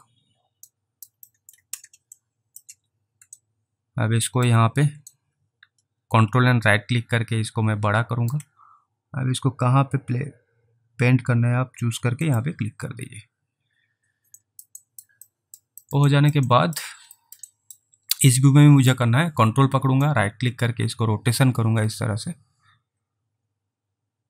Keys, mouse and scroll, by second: 0.8 alt+right click, 1.4 alt+middle click, 2.3 alt+click, 3.5 ctrl+right click, 5.2 ctrl+right click, 12.3 click, 14.5 alt+right click, 14.9 alt+right click, 15.3 alt+middle click, 15.9 alt+middle click, 16.2 alt+right click, 16.6 alt+right click, 17.2 alt+middle click, 17.5 alt+right click, 20.1 ctrl+click.